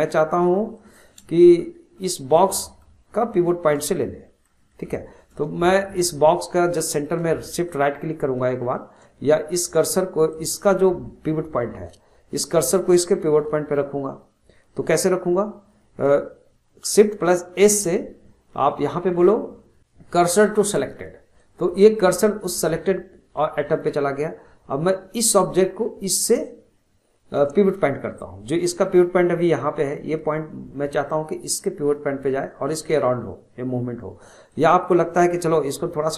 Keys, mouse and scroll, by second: 0.1-9.9 shift+middle drag, 10.3 click, 17.5 shift+s, 25.2 click, 34.5 click, 34.8-35.9 scroll down 1, 35.9 scroll up 2.